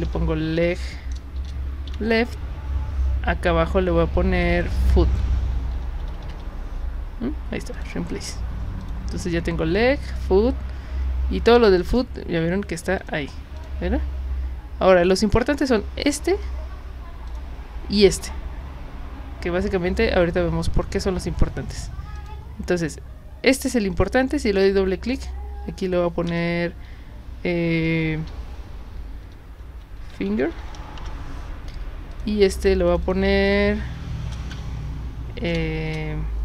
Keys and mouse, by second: 0.0-1.9 typing, 4.6 click, 5.5-6.8 typing, 7.7 click, 8.8 click, 11.8 click, 13.0 click, 13.6 click, 17.3 click, 22.2 click, 24.3 click, 25.1 click, 26.3 BackSpace, 28.2-31.1 typing, 32.1 click, 32.9 click, 33.5 click, 34.3 BackSpace, 34.5 BackSpace, 35.8 shift+-.